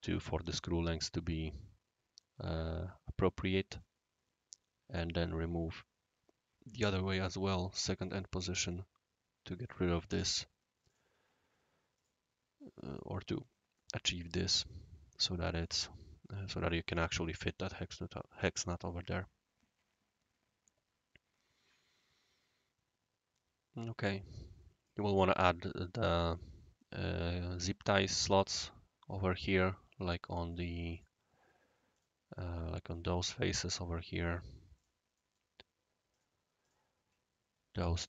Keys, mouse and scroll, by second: 3.7-4.9 right drag, 8.0 click, 10.8 click, 11.9 click, 12.9 click, 13.7-14.2 right drag, 15.5 click, 17.5-24.9 right drag, 26.2 click, 30.2 click, 30.9 click, 31.9 click, 32.3-33.5 right drag, 34.0-34.7 scroll up 1, 34.7 click, 35.1 middle click, 35.2 scroll up 1, 35.3 scroll down 1, 36.1 click, 36.6 click.